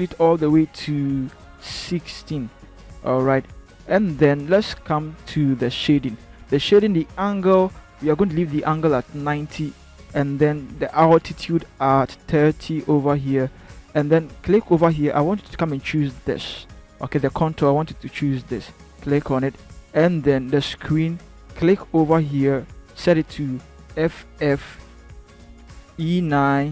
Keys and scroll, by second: 1.1-2.6 typing, 8.8-9.9 typing, 23.8 f, 24.1 f, 25.7 e, 26.6 9.